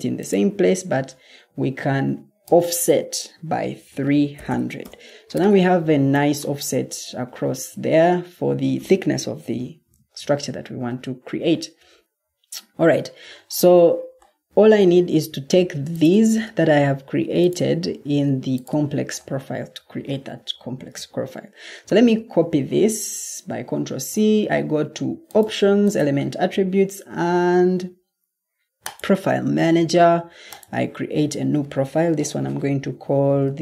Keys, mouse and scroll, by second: 4.0-4.4 typing, 4.7 Return, 5.7-6.7 typing, 21.8 ctrl+c.